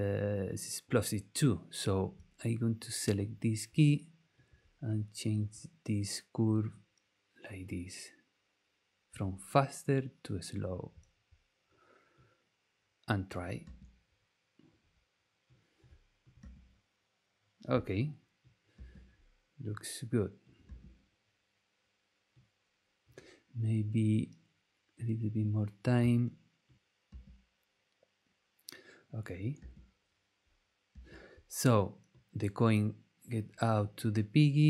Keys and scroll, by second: 13.6 space, 16.4 space, 18.7 space, 20.6 space, 27.1 space, 29.6 space, 30.9 space.